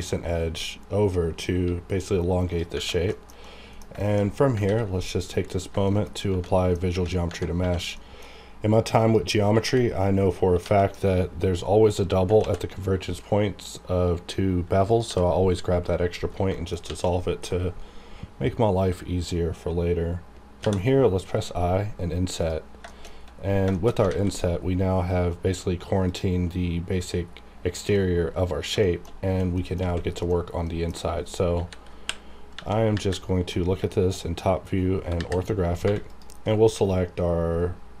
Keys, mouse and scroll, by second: 2.5 click, 2.7 Tab, 3.1 shift+scroll down 1, 3.4 middle click, 4.0 shift+middle click, 4.3 scroll up 1, 4.6 ctrl+a, 5.4 click, 5.8 shift+middle click, 6.1 scroll up 1, 6.5 middle click, 7.6 1, 7.9 middle click, 8.3-9.0 scroll up 1, 9.0 click, 9.6 g, 10.2 right click, 10.6 g, 11.0 right click, 11.1 right click, 12.4 x, 14.9 click, 15.0 g, 15.5 right click, 16.2 scroll down 1, 16.5 shift+middle click, 16.7 shift+scroll down 1, 16.8 a, 17.0 middle click, 17.5-18.0 scroll down 1, 18.5-20.6 scroll up 1, 22.4 click, 22.9 shift+middle click, 23.1 shift+scroll down 2, 23.7 shift+middle click, 24.0 scroll up 1, 24.1 alt+a, 24.6-26.1 scroll up 1, 26.1 click, 26.3-26.7 scroll up 1, 27.2-27.6 scroll down 1, 27.9 middle click, 28.0 scroll down 1, 28.8 shift+middle click, 29.1 shift+scroll up 1, 29.5 middle click, 29.8 a, 29.8-30.2 scroll down 1, 30.2 middle click, 31.5-32.9 typing, 33.8-34.8 shift+scroll down 3, 35.2 KP_5, 35.8 3, 36.1 click, 37.6-38.0 scroll up 1.